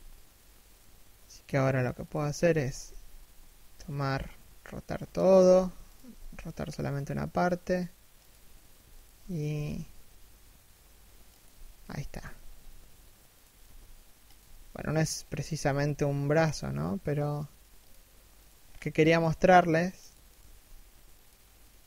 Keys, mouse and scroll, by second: 1.9 a, 2.4 r, 5.1 a, 5.5 alt+right click, 5.8 r, 8.6 alt+right click, 9.0 r, 11.5 a, 11.9 g, 14.0 a, 14.4 right click, 15.3 g, 18.0 right click, 18.3-18.7 scroll up 1, 18.7 g, 19.9 right click, 20.0 g, 21.4 right click, 21.6 g.